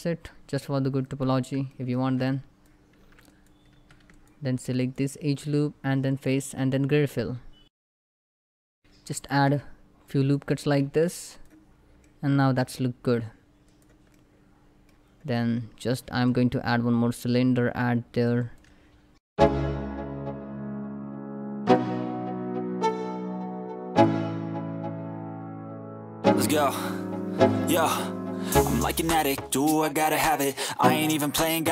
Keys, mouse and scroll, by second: 0.7 click, 1.0 Tab, 1.3 middle click, 1.7 3, 1.9 click, 2.7 x, 2.9 click, 3.6 2, 3.8 alt+click, 8.3 middle click, 8.8 ctrl+r, 8.9-9.6 ctrl+scroll up 2, 9.8 click, 10.2 right click, 10.5 Tab, 11.1 click, 11.4 scroll down 1, 11.7-13.3 middle drag, 13.3 click, 13.7 middle click, 14.9 click, 15.1 scroll up 1, 15.9 shift+a, 17.5 click, 19.2 s, 19.7 click, 20.0 x, 20.1 click, 20.4 shift+a, 20.8 click, 21.6 3, 21.7 click, 21.9 a, 22.1 s, 23.0-23.6 scroll down 2, 23.1 middle click, 23.4 /, 23.6 middle click, 23.7 click, 24.1 s, 24.8 shift+click, 25.3 scroll up 1, 25.5 s, 25.7 shift+click, 26.1 click, 26.6 s, 26.7 z, 27.1 click, 27.2 scroll down 1, 27.7 click, 28.8 shift+middle click, 29.0 scroll down 1, 29.1 click, 29.6 shift+middle click, 29.6 scroll up 1, 29.8 s, 29.9 shift+z, 30.4 shift+click, 31.0 scroll down 1, 31.0 shift+middle click, 31.1 click, 31.3 Tab, 31.6 click.